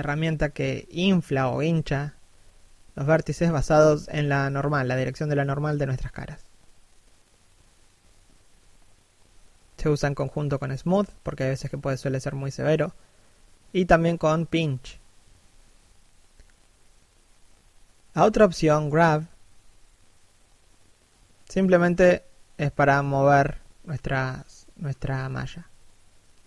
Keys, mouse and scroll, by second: 0.3 click, 1.0 middle click, 2.1-2.5 scroll up 1, 3.4 middle click, 4.4 middle click, 6.4 s, 7.3 click, 8.9 middle click, 10.6 3, 11.3 1, 11.7 scroll down 1, 14.8 shift+middle click, 16.9 f, 17.9 click, 18.2 shift+middle click, 19.1 click, 20.8 middle click, 22.1 7, 22.6 click, 26.2 click.